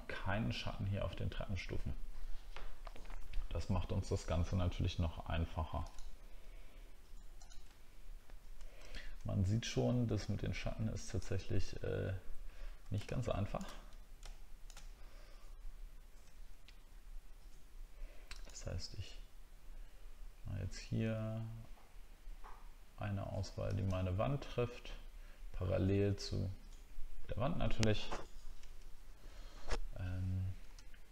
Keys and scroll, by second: 7.8 alt+scroll down 1, 8.1 alt+scroll up 1, 8.8 alt+scroll up 1, 16.9-17.4 alt+scroll up 1.